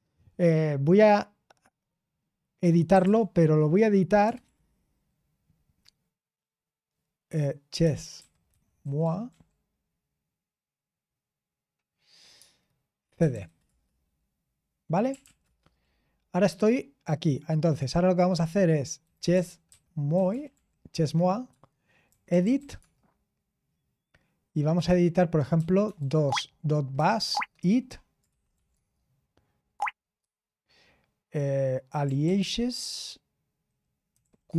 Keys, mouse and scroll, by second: 2.6-4.2 typing, 7.5-9.7 typing, 12.3-13.8 typing, 14.8-15.5 typing, 18.7-23.0 typing, 25.3-28.7 typing, 29.7 Tab, 30.2 Tab, 31.6-32.7 typing, 33.9-34.5 typing.